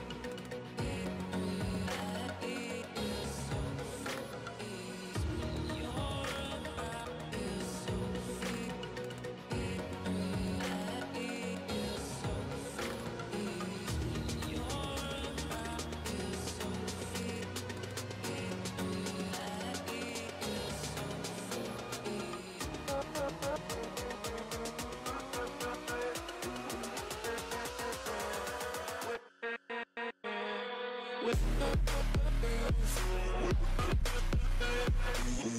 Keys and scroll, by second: 0.8 ], 0.8 ], 2.8 ctrl+z, 5.8 ctrl+z, 6.9 ctrl+z, 11.3 [, 11.7 [, 11.7 ctrl+z, 15.3 ], 17.5-18.6 typing, 20.1 [, 20.7 ctrl+z, 20.7-21.2 [, 21.3 [, 25.3 ctrl+z, 26.1 ], 27.1 ctrl+z, 29.8 ctrl+z, 32.3 ctrl+z, 33.3 ctrl+z, 35.4 ctrl+z.